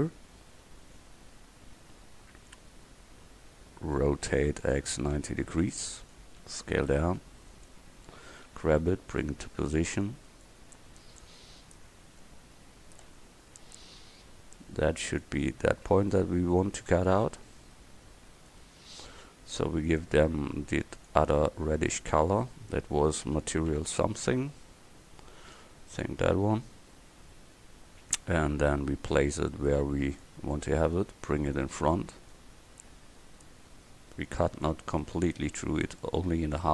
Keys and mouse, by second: 0.0 middle click, 4.3 r, 6.5 s, 8.5 g, 9.5 s, 13.1 g, 15.7-16.2 middle drag, 21.0 middle click, 22.2-26.1 drag, 28.2-30.3 drag, 30.6 click, 31.0-35.1 drag.